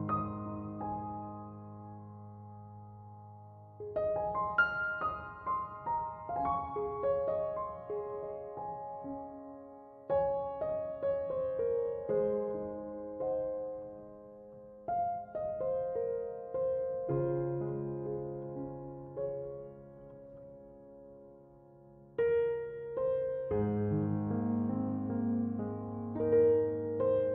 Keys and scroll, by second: 2.4 2, 2.7 Return, 26.2-27.3 typing.